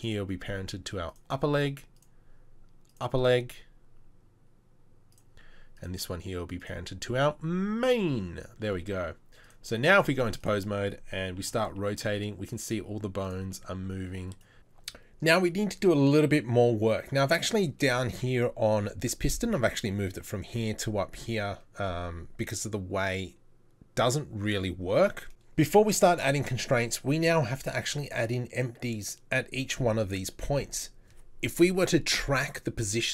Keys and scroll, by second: 11.5 r, 13.5 r.